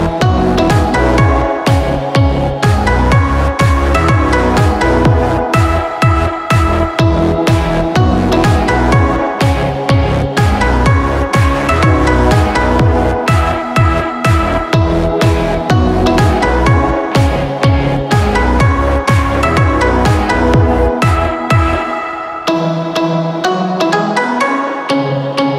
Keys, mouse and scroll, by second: 0.4 click, 2.8 click, 6.1 click, 10.8-14.1 drag, 14.1-15.1 middle drag, 15.1 click, 15.6 click, 16.0-17.9 middle drag, 17.9 scroll up 2, 18.1 middle click, 18.7-19.2 scroll down 2, 19.2 shift+middle click, 19.5 scroll up 1, 19.9-22.2 middle drag, 22.2 scroll up 1, 22.4-23.9 middle drag, 23.9 shift+scroll down 1, 24.6 scroll down 2, 24.7 middle click, 25.4 click.